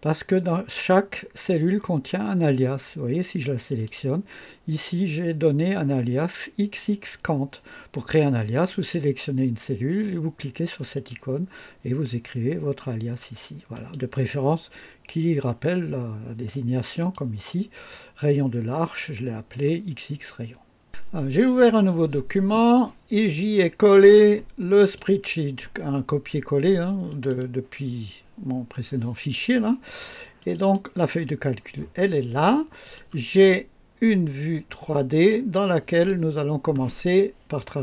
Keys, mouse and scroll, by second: 3.7 click, 8.7 click, 11.0 click, 13.8 click, 17.0 click, 20.9 click, 24.8 click, 27.1 click, 30.4 click, 32.8 click, 34.9 click.